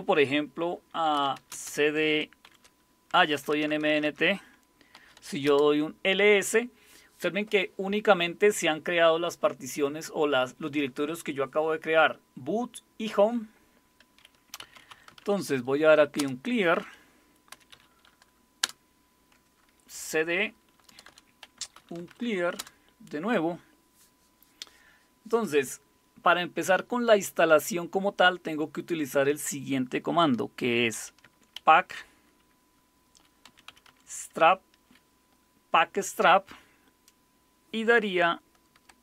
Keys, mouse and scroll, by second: 0.9-5.6 typing, 14.3-15.7 typing, 16.2 Return, 17.3-18.0 typing, 18.6 Return, 20.9 Return, 21.0 Return, 21.3-22.6 typing, 30.7-32.0 typing, 33.2-34.3 typing.